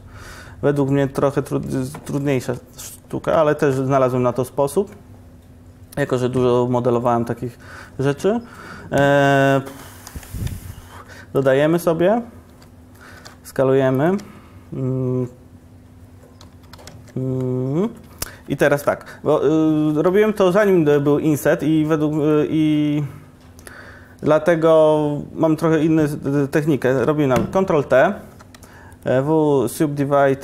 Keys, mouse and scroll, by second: 2.3 g, 3.7 shift+a, 8.2 alt+g, 9.3 Tab, 10.1 ctrl+r, 13.2 s, 14.2 Tab, 16.7 Escape, 17.0 Tab, 18.9 ctrl+KP_Decimal, 20.5 1, 26.9 ctrl+t, 28.4 2.